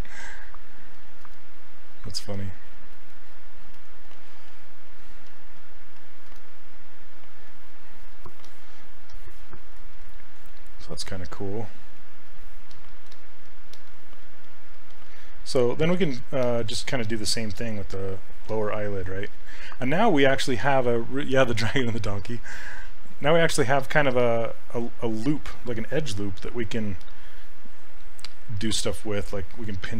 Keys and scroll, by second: 13.1 s, 27.8 s, 28.3 s.